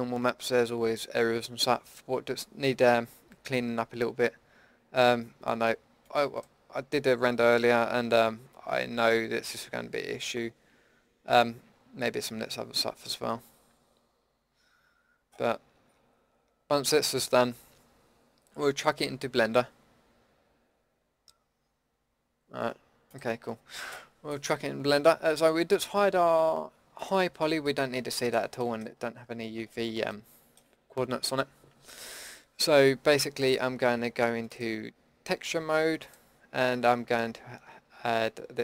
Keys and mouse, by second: 24.4-27.0 middle drag, 27.0-28.8 drag, 28.8-33.1 middle drag.